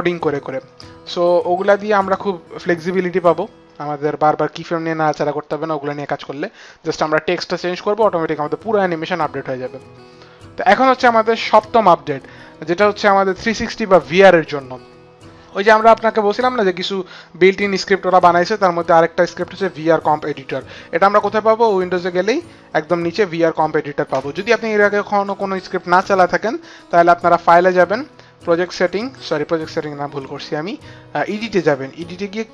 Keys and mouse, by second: 16.1 click, 17.5 click, 18.2 click, 20.4 click, 22.0 click, 23.4 click, 24.8 click, 26.8 click, 30.1 click, 31.1 click.